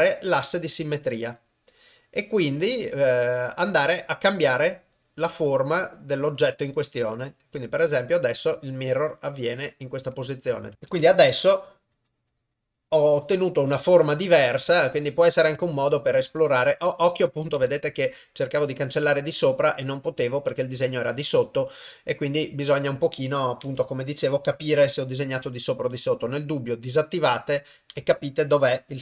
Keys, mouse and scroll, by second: 7.6 shift+middle click, 10.7 ctrl+Tab, 11.0-13.6 ctrl+drag, 14.7 ctrl+click, 15.6 ctrl+click, 16.2 ctrl+click, 17.7 ctrl+click, 19.8 ctrl+click, 23.8 ctrl+click, 24.9 ctrl+click, 28.1-29.0 ctrl+drag.